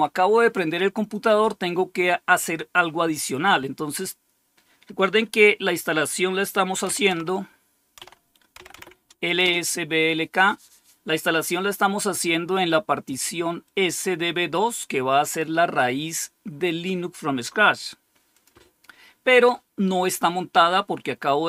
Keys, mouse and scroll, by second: 1.0 click, 6.8-9.1 typing, 9.3 Return, 13.5-15.3 drag, 18.2 click.